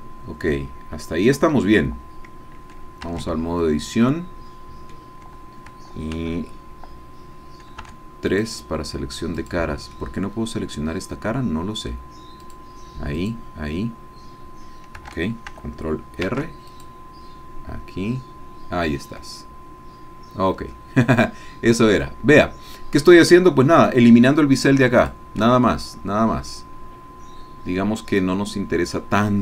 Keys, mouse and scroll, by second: 1.3 Escape, 3.1 Tab, 3.6-5.3 drag, 8.3 click, 8.3 3, 9.6 click, 10.0-12.1 drag, 12.4 click, 13.2 click, 16.3 ctrl+r, 16.7 ctrl+click, 25.1 click, 25.7-29.4 drag.